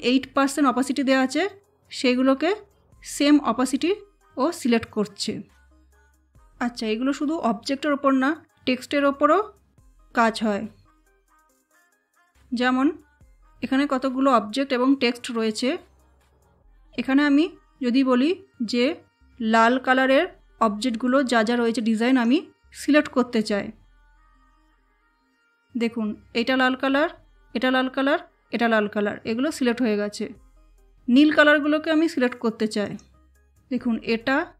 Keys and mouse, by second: 22.0 click, 24.8 click, 32.7 click.